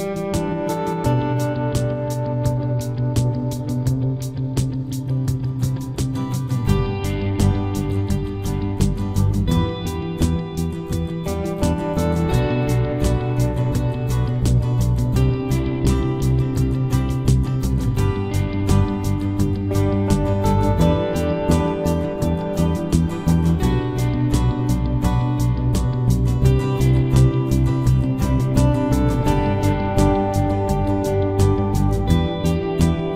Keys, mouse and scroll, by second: 0.3-2.1 right drag, 0.5 z, 1.0 z, 3.4 z, 3.9 c, 5.5-6.8 right drag, 5.5 z, 6.3 c, 6.8 click, 11.8-13.5 right drag, 12.5 c, 13.5 middle click, 14.6-15.6 drag, 15.6 right click, 16.2-18.2 middle drag, 16.9 c, 19.3-20.9 right drag, 20.0 c, 23.5 c, 25.2 right click, 25.2 z, 26.5 c, 27.5-29.3 middle drag, 28.6 KP_3, 28.9 KP_Decimal, 30.3 z, 31.1 c, 32.9 right click, 33.0 middle click.